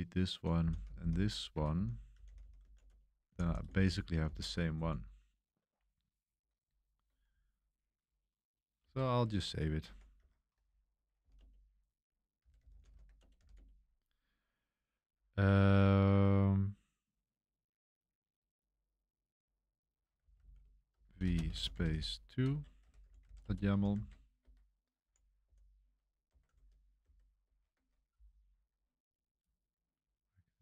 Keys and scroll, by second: 0.0-4.7 typing, 8.9 super+3, 9.6-13.9 typing, 15.2-16.0 typing, 19.9-25.5 typing, 23.9 Return, 23.9 super+v, 24.4 Home, 26.3 Home, 26.5 super+1, 27.0 super+3, 27.4 super+1.